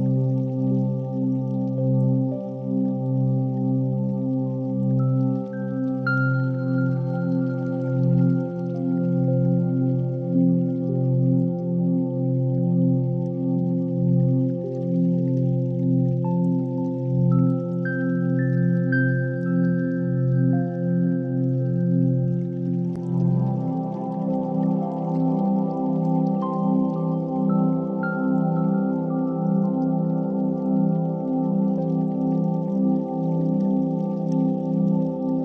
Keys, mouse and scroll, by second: 2.1 s, 3.4 click, 3.5 g, 3.8 z, 4.4 click, 6.4-8.4 drag, 7.4 0, 9.4 KP_3, 10.3 shift+d, 11.1 r, 13.7 click, 14.4 KP_1, 15.6 KP_0, 17.7 click, 21.0 click, 22.1 click, 28.3 click, 29.8-30.9 drag, 31.8 click.